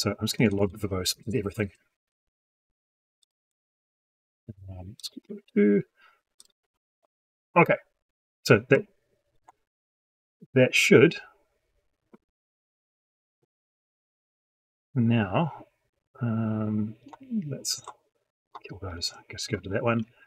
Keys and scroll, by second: 1.0 ctrl+c, 6.6 ctrl+v.